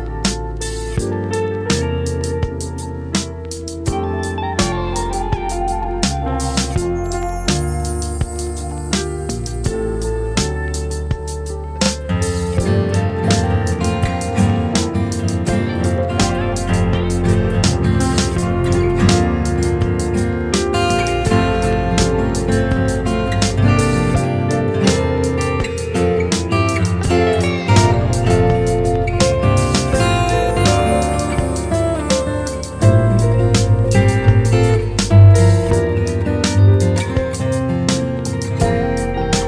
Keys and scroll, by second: 8.6 super+Tab, 9.9 super+Tab, 17.0 Return, 17.6 super+Return, 22.3 Return, 39.2 alt+shift+Return.